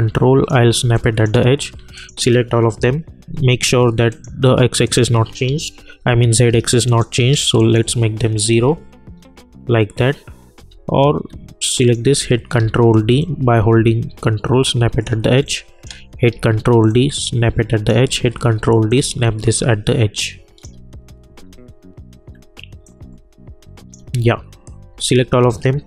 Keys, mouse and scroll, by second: 0.8 space, 0.9 click, 1.9 shift+click, 2.7 p, 4.1 click, 8.6-9.2 scroll up 1, 9.2-9.8 scroll down 1, 10.9-11.3 alt+scroll up 1, 11.8 click, 12.5 ctrl+d, 13.2-15.4 drag, 15.4 space, 15.7 click, 16.3 ctrl+d, 16.9-18.3 drag, 18.3 ctrl+d, 18.9-21.6 drag, 19.4-20.7 ctrl+drag, 21.6-22.4 alt+scroll up 2, 22.4-22.8 scroll up 1, 23.1-24.9 ctrl+drag, 25.0 ctrl+a.